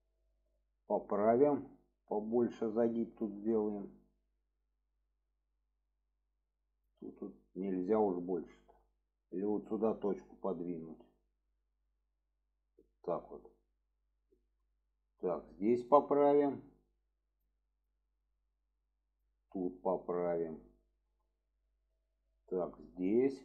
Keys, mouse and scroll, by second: 0.3 middle click, 1.2 click, 1.9-3.2 drag, 3.5 shift+middle click, 6.1 click, 7.1 click, 8.5 shift+middle drag, 9.2 click, 10.1 click, 11.5 click, 12.2 click, 14.3 shift+middle drag, 15.6 click, 16.8 click, 17.8-19.2 drag, 19.7 click, 20.9 shift+middle drag, 22.3-22.7 drag, 23.2 click.